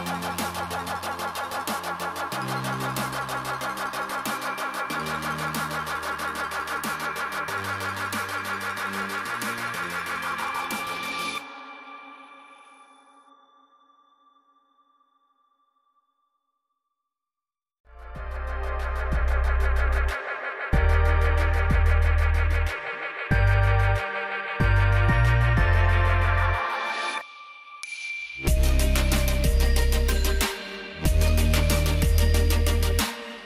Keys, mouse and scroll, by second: 7.4 click, 10.6 ctrl+c, 11.8 click, 16.9 Caps_Lock, 16.9 click, 17.7 v, 18.6 click, 25.2 s, 26.5 click, 33.4 Caps_Lock, 33.4 click.